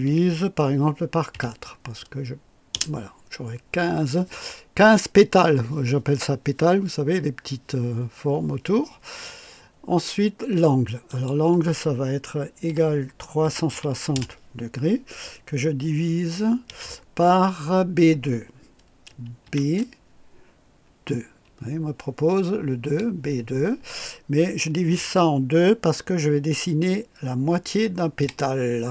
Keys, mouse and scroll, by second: 0.0 KP_Divide, 1.3 KP_4, 2.7 Return, 11.1 click, 12.6 =, 13.4 KP_3, 13.7 KP_6, 14.1 KP_0, 19.4 shift+b, 22.8 KP_2, 24.9 KP_Divide, 28.2 KP_2.